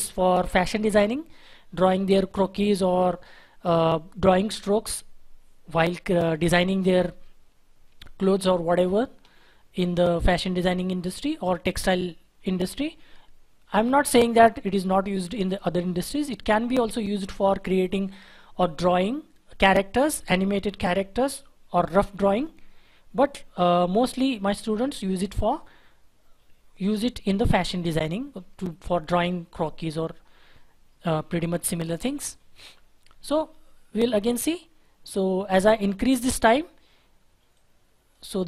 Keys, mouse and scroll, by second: 32.0 Delete, 33.0 shift+F4.